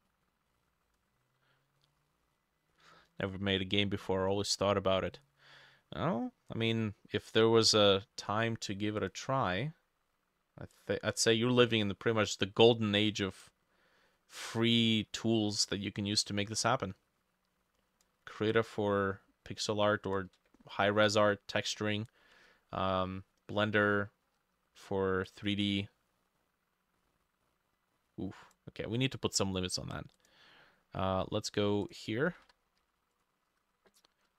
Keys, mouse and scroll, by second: 1.8 middle click, 2.8 middle click, 5.2 middle click, 6.6 middle click, 7.3-7.7 scroll up 4, 7.7 middle click, 21.8 middle click, 31.0-31.8 scroll up 3, 32.0 double click, 32.5 ctrl+c, 32.8 ctrl+c, 33.6 Return.